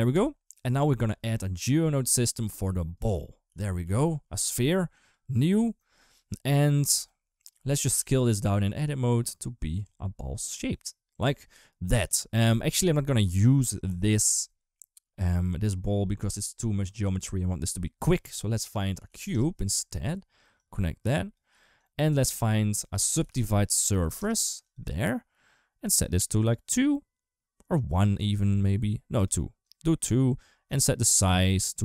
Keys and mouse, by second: 0.9 shift+a, 3.3 g, 4.8 click, 7.6 Tab, 7.8 a, 8.1 s, 9.6 Tab, 10.3 Tab, 10.9 Tab, 17.9 shift+a, 20.4 click, 21.7 click, 22.1 shift+a, 23.8 Down, 26.2 click, 28.9 click, 29.4 click, 30.0 click, 30.8-31.8 shift+drag.